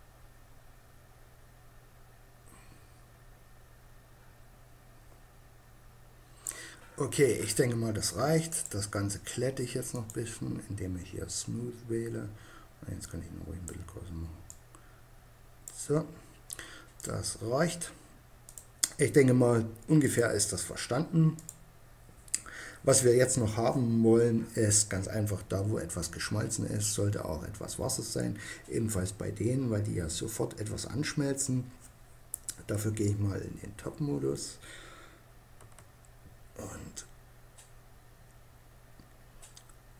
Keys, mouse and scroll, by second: 7.8-9.5 drag, 12.4-15.3 drag, 15.5 middle click, 18.0 middle click, 19.3-21.1 drag, 28.8-32.3 middle drag, 32.3 KP_7, 34.8 KP_Decimal, 37.4 middle click.